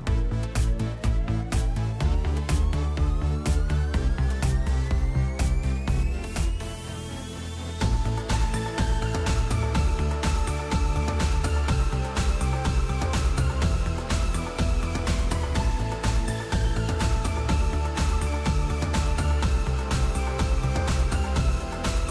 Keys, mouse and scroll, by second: 0.0 click, 2.2 click, 4.2 click, 13.6 click, 18.9 click, 20.7 click.